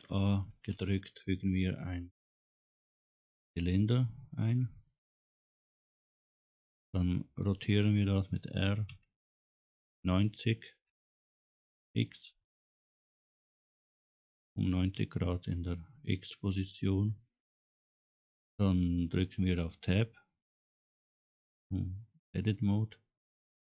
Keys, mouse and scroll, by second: 0.6 shift+a, 9.0 r, 20.7 Tab.